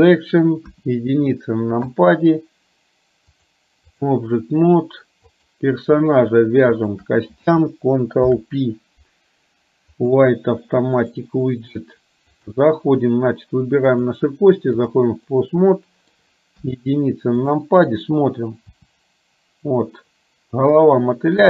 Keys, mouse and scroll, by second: 0.8 KP_1, 3.5 click, 5.5 click, 6.9 shift+click, 8.3 ctrl+p, 11.1 middle click, 12.4 click, 14.0-15.0 drag, 15.4 middle click, 16.8 KP_1, 17.6 click, 18.9 r.